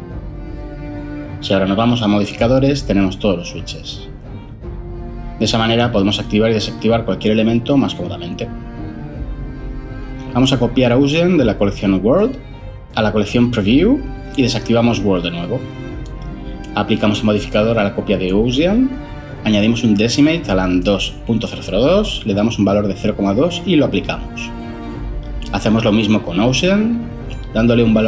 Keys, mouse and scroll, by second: 0.0-1.4 typing, 11.5 ctrl+c, 14.3 ctrl+v, 22.5 typing, 22.9 Return.